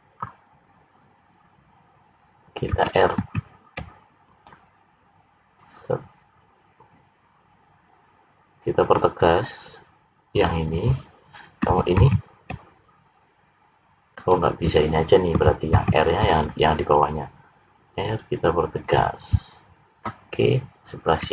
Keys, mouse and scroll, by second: 3.2 ctrl+r, 11.9 ctrl+r, 15.8 ctrl+r.